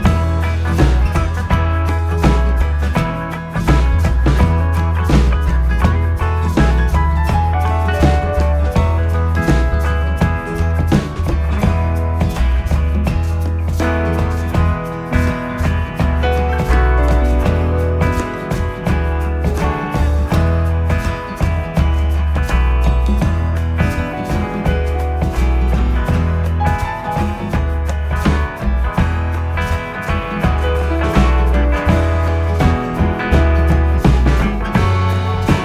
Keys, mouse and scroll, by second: 0.3-1.2 scroll up 2, 1.2-2.3 middle drag, 2.3-2.7 scroll up 1, 3.9 KP_Decimal, 5.1-5.7 scroll down 4, 5.7-8.7 middle drag, 9.9 ctrl+f, 13.8-19.9 drag, 22.3-25.3 drag, 25.4 shift+r, 27.6-28.8 shift+drag, 28.8 KP_7, 32.2 e, 34.1-35.6 middle drag.